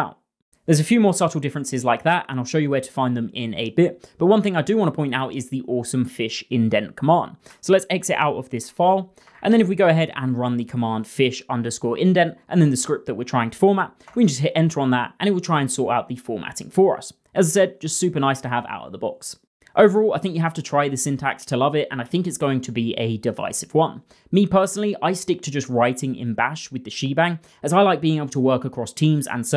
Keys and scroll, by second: 7.9 Escape, 8.1 :.